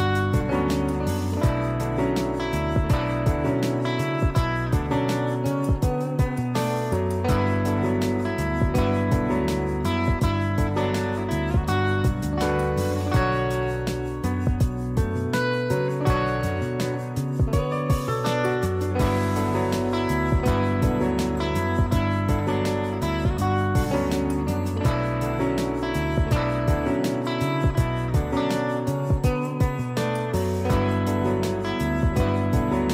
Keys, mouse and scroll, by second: 1.2 click, 5.8 click, 6.4 space, 6.5 click, 12.3 z, 12.5 click, 16.8 space, 16.9 click, 19.2 ctrl+click, 20.2 ctrl+g, 21.2 ctrl+shift+e, 23.0 shift+F4, 29.2 click, 31.2 click.